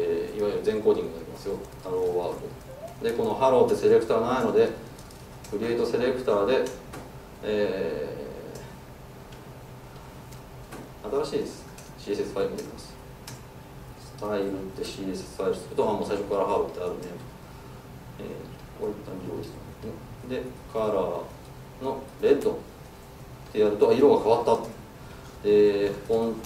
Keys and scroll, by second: 3.8 alt+Return, 5.0 super+z, 5.4 alt+Return, 10.8 super+z, 11.7 alt+Return.